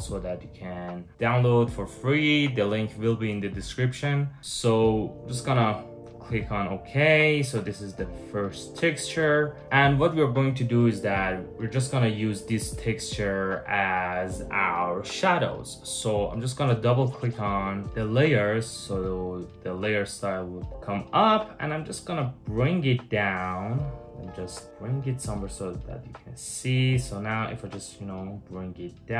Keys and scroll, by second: 3.9 Return, 24.6 space, 24.7 space, 25.1 super+-.